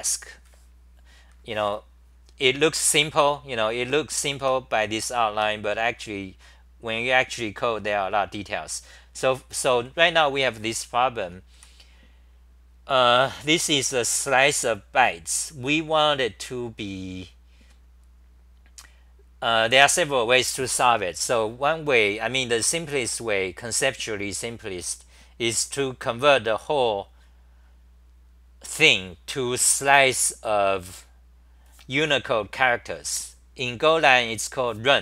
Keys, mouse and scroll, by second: 2.3-4.4 scroll down 5, 4.4 6, 5.4 ctrl+g, 5.6 scroll down 1, 9.6 scroll down 1, 9.6-12.0 typing.